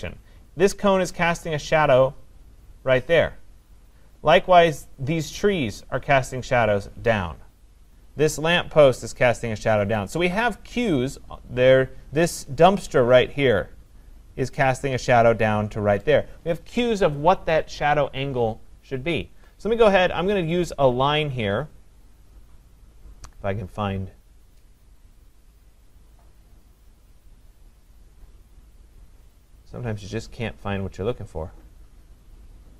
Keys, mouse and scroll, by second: 4.5-9.8 scroll, 10.8 click.